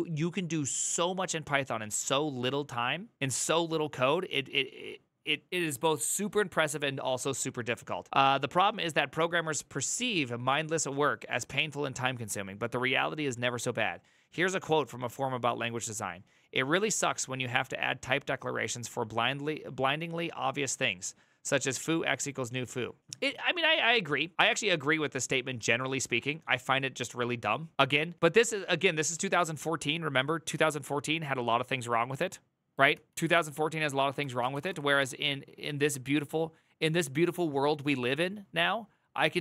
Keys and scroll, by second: 32.7 alt+{, 33.9-35.2 typing.